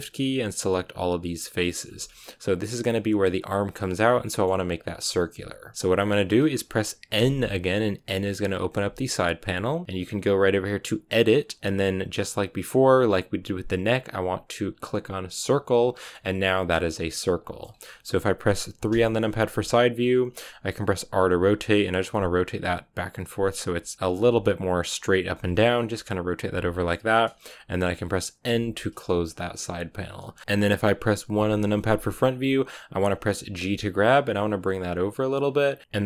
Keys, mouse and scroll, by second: 1.8 scroll down 2, 1.9-7.0 middle drag, 7.0 n, 15.5 click, 16.0-18.8 middle drag, 18.8 KP_3, 19.8-21.0 scroll up 1, 21.0 r, 23.6 r, 25.2 r, 26.3 r, 28.4 n, 30.4 KP_3, 31.3 KP_1, 33.5 g, 35.8 click.